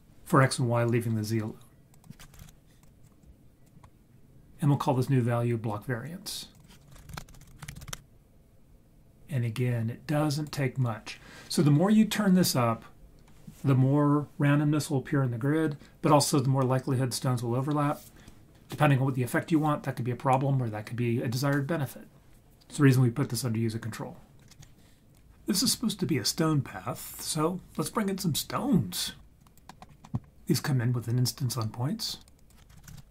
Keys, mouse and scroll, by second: 1.9-2.8 drag, 3.2-3.6 drag, 6.8-7.9 shift+drag, 7.4 r, 8.0-10.5 drag, 24.6 ctrl+s, 29.4 click, 29.7 middle click, 29.9 scroll down 2, 30.0 middle click, 30.1 scroll up 1, 30.3 scroll down 1, 30.3 ctrl+z, 32.1 click, 32.3 click, 32.7 shift+a.